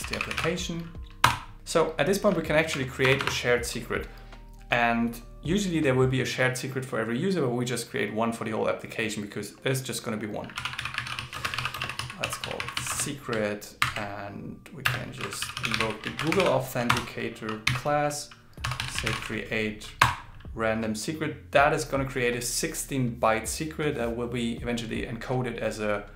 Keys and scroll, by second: 13.8 shift+o, 15.2 shift+g, 17.1 shift+a.